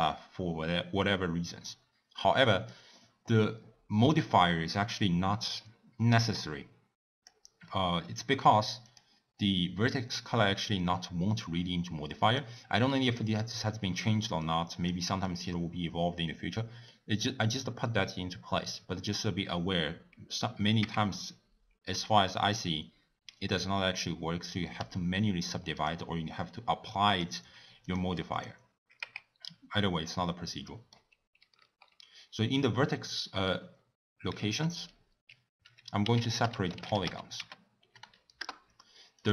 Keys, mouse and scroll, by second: 2.7 click, 7.7-8.8 middle drag, 8.8 click, 12.3 click, 14.7 click, 15.2-16.9 drag, 16.9-19.9 middle drag, 20.8 Tab, 24.8-25.9 right drag, 27.1 drag, 28.3 click, 29.0 Tab, 29.8-33.7 middle drag, 34.3 ctrl+a.